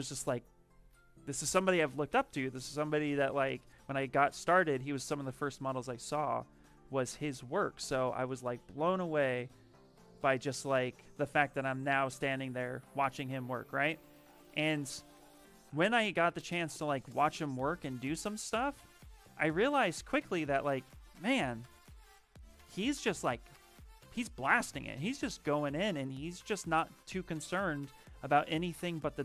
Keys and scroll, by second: 6.5 ctrl+z.